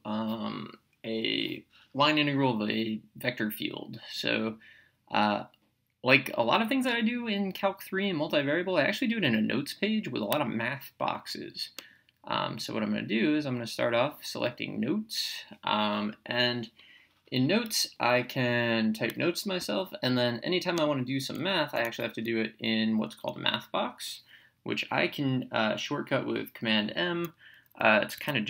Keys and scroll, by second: 20.8 Menu, 21.6 Down, 22.9 Right, 28.2 Escape.